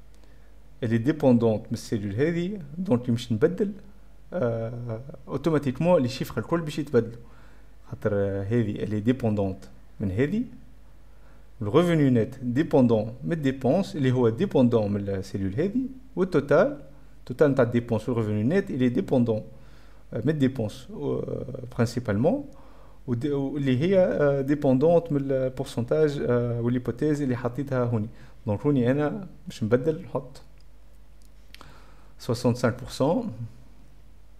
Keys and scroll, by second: 30.3 F10, 30.3 F11, 30.4 =, 30.5 BackSpace, 30.8 BackSpace, 33.8 BackSpace.